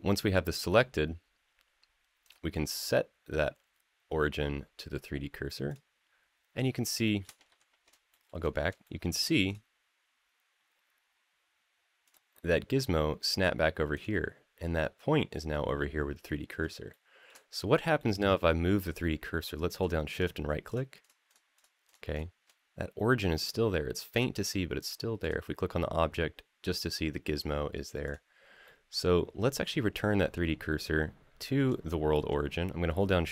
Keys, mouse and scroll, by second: 2.0-5.5 right drag, 6.4 scroll down 2, 6.8 shift+middle click, 7.3 ctrl+z, 7.9 shift+middle drag, 8.3 scroll up 1, 8.6-8.9 shift+middle drag, 9.2-11.9 right drag, 13.0-13.7 scroll up 3, 13.7 click, 16.7-17.0 shift+middle drag, 17.2 scroll down 2, 17.8-18.8 middle drag, 20.0-20.3 shift+right drag, 20.8-21.9 shift+right drag, 25.0 click, 27.8 click, 28.4-29.2 middle drag, 31.6-31.9 shift+middle drag.